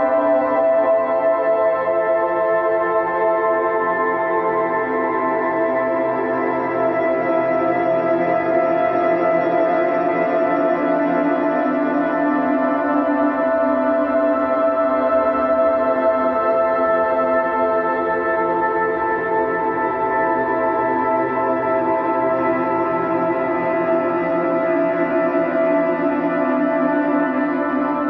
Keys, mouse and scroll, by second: 1.4 g, 3.7-6.1 middle drag, 6.1-7.2 drag, 7.2-8.3 middle drag, 8.3 click, 9.5 click, 10.5 click, 11.1-12.4 middle drag, 12.4-14.0 right drag, 14.0-16.3 drag, 16.3-18.3 middle drag, 18.5 a, 19.3 click, 21.0 middle click, 21.9 ctrl+r, 23.7 ctrl+r, 25.2 middle click, 25.9 a, 27.0 click, 27.9 g.